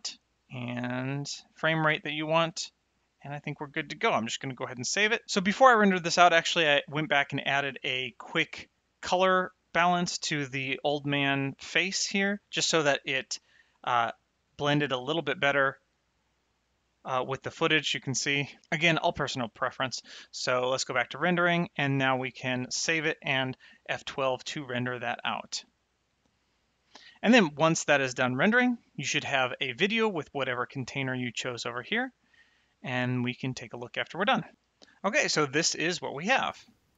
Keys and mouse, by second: 13.6 click, 16.8 click, 20.8 click, 22.8 ctrl+s, 24.3 ctrl+F12, 36.3 click.